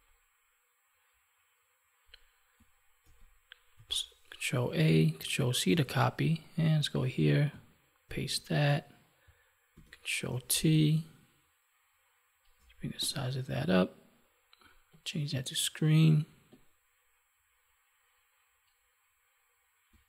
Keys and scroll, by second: 3.0 ctrl+a, 5.6 ctrl+w, 8.0 ctrl+v, 9.6 ctrl+t.